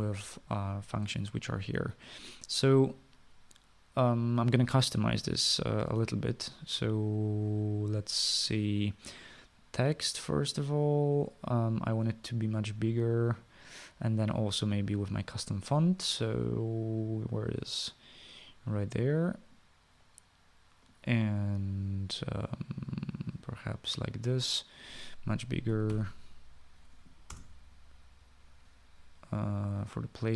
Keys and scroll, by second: 0.0-7.1 typing, 26.7 typing, 28.3 Return.